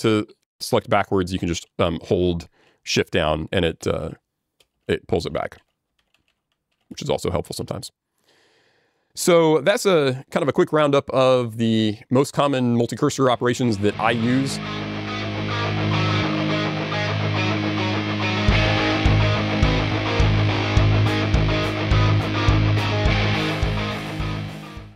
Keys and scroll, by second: 1.4 alt+shift+j, 1.4 ctrl+shift+g, 4.7 alt+j, 4.7 ctrl+g, 5.9 alt+shift+j, 5.9 ctrl+shift+g.